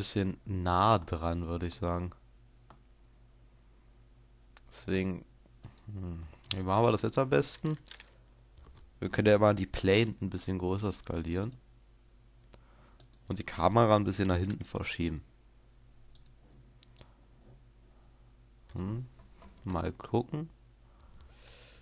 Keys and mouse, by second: 0.0 Escape, 10.1 s, 11.6-13.0 drag, 13.1-14.8 right drag, 14.5 g, 16.1 middle click, 16.2-19.6 drag, 19.6 KP_0.